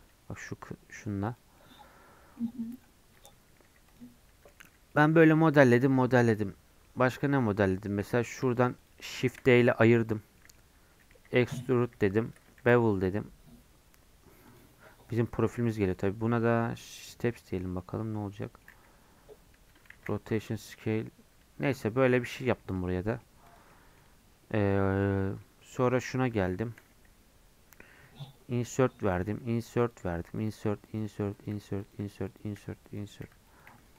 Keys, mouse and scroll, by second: 1.2 click, 1.6 middle click, 1.9 Tab, 2.4 middle click, 3.1 click, 3.6 3, 3.9 click, 4.1 scroll down 1, 4.3 Tab, 4.5 middle click, 4.7 scroll up 1, 4.9 middle click, 5.2 Tab, 5.4-7.4 middle drag, 7.4-8.3 scroll up 1, 8.3 shift+click, 9.2 shift+d, 10.3 scroll up 1, 11.0 middle click, 11.8 e, 12.6 ctrl+b, 15.9-17.6 drag, 17.6 scroll up 3, 18.0 middle click, 18.8 scroll down 2, 19.4 scroll up 1, 19.5 Tab, 19.9 ctrl+a, 21.4 Tab, 22.3 Tab, 22.6 scroll down 5, 22.7 middle click, 23.5 click, 23.7 middle click, 24.4 Tab, 24.8 middle click, 25.1-25.4 scroll up 3, 25.4 middle click, 25.8 click, 26.1 3, 26.6 shift+middle click, 26.9-27.8 scroll up 2, 27.8 i, 29.3-33.9 typing.